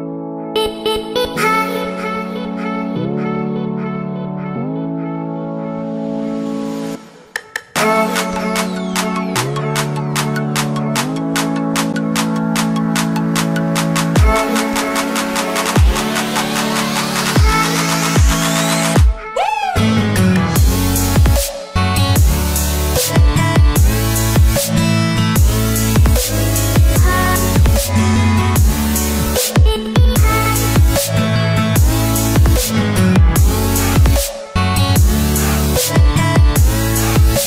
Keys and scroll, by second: 0.5 ctrl+alt+z, 21.8 ctrl+t, 24.4 Return.